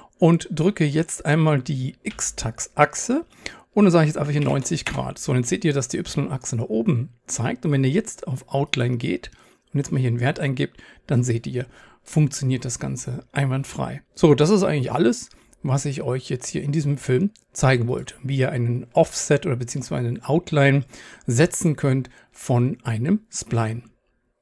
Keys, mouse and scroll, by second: 18.6 click, 18.8 click, 24.1 click, 24.3 click.